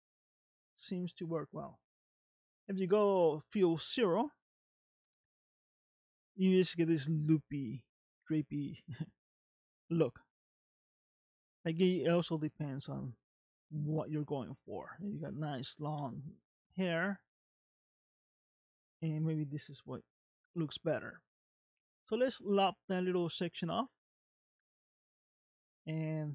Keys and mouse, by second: 2.4 click, 4.1 middle click, 5.1 space, 12.0 space, 12.5 middle click, 14.1 middle click, 17.3 shift+middle click, 18.5-19.6 middle drag, 20.6 middle click.